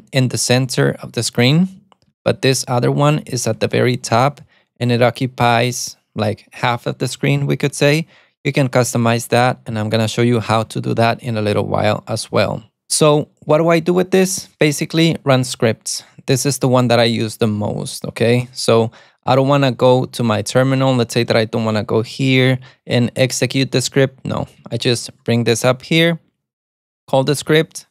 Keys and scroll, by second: 2.3 alt+super+c, 15.2 alt+super+a, 20.3 Escape, 21.6 ctrl+b, 21.6 h, 24.8 alt+super+a, 24.8 t.